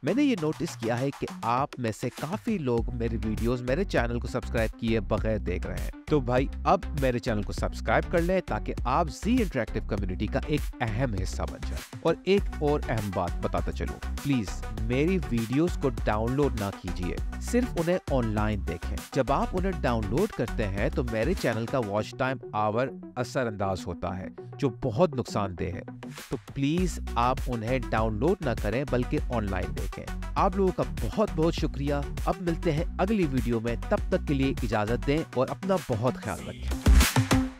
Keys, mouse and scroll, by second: 32.0-32.9 scroll up 1, 32.9-37.5 scroll up 1.